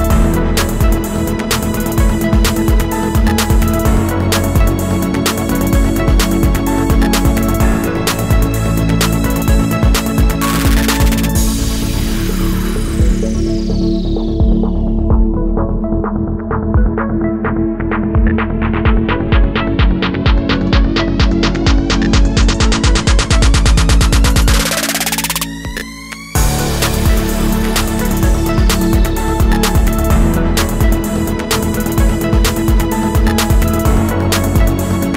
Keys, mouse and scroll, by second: 5.6 alt+scroll down 1, 6.2 space, 12.1-12.9 alt+scroll down 1, 12.9 space, 18.5-19.2 alt+scroll up 1, 19.4 alt+scroll up 1, 22.3-22.8 alt+scroll down 1, 22.9 ctrl+z, 23.7 space, 24.5 alt+scroll down 1, 24.8 space, 27.9 space.